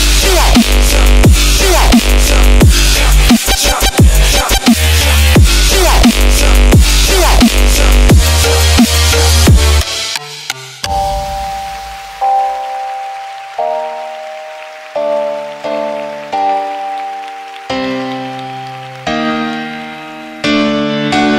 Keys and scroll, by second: 11.4 shift+Right, 12.6 Up, 14.3 Left, 15.6 Down, 17.3 scroll down 1, 18.3 scroll down 1.